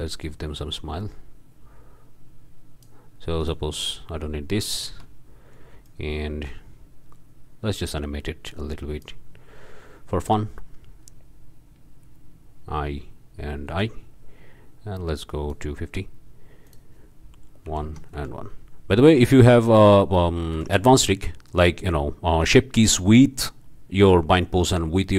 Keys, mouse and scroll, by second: 3.4 click, 4.9 Delete, 5.8-9.4 drag, 12.6 i, 13.7 i, 15.3 click, 16.6 click, 17.7 1, 17.8 Tab, 18.1 1, 19.2 Escape, 19.7 click, 20.6 1, 20.8 Return, 23.0 click, 24.4-25.1 drag.